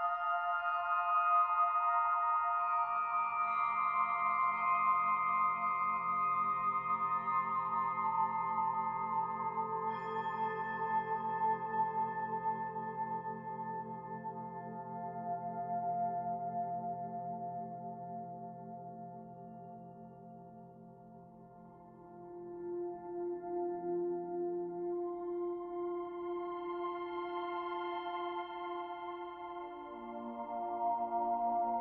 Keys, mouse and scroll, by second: 0.1-1.7 scroll up 4, 2.5 s, 6.7 middle click, 7.7 shift+middle click, 8.3 scroll down 1, 8.4 middle click, 9.1 middle click, 9.8 shift+middle click, 11.5 shift+d, 12.4 click, 14.7 middle click, 15.6 shift+middle click, 16.9 click, 19.7 middle click, 21.1 click, 22.4 middle click, 24.0 middle click, 25.8 click, 27.8-28.3 scroll down 3, 28.3 shift+middle click, 28.9-29.3 scroll down 2, 29.6 shift+middle click, 30.2 middle click, 31.6 shift+middle click.